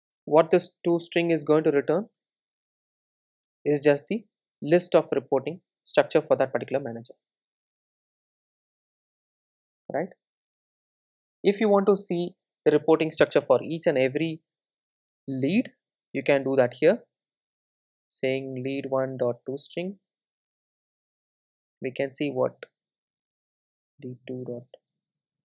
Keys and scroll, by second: 2.2 Tab, 6.7 super+s, 16.7 Tab, 19.4 Return, 23.1 super+d.